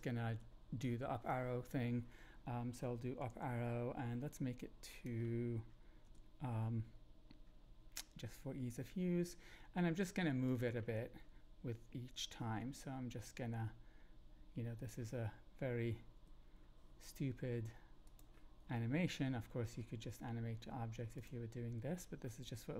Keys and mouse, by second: 0.2 Tab, 3.2 Up, 5.0-6.0 drag, 9.8 g, 10.4 click, 12.8 Up, 13.9 g, 14.8 click, 16.1 Up, 18.0 click, 18.0 g, 19.1 Up, 20.4 g, 21.1 click.